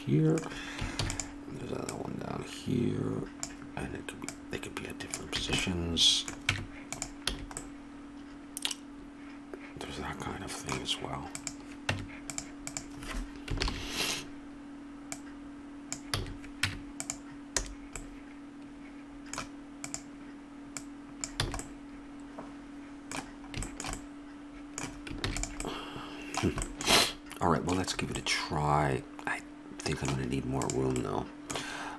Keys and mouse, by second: 1.0 shift+d, 1.9-3.6 drag, 5.4 a, 6.5 Tab, 7.3 a, 11.4-14.6 drag, 11.9 Tab, 13.6 ctrl+l, 15.1 click, 16.2 a, 16.7 Tab, 17.7 a, 21.5 a, 21.6-23.0 drag, 25.3 ctrl+s, 30.6-31.9 right drag, 31.0-31.9 drag.